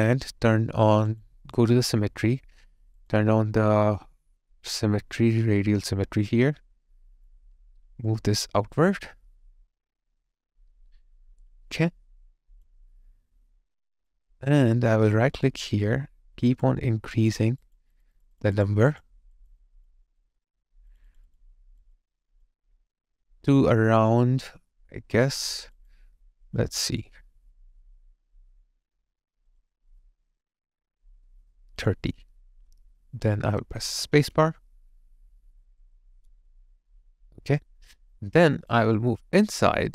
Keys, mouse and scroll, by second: 15.3 right click, 17.6 double click, 25.7 double click.